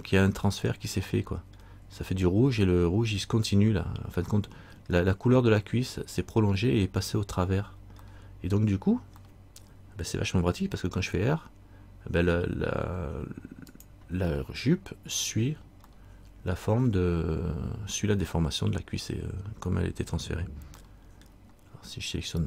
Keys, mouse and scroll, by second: 1.3 middle click, 4.5 middle click, 8.2 middle click, 9.4 middle click, 10.8 r, 14.5 middle click, 15.3-15.9 scroll down 1, 16.1 middle click, 21.0 middle click.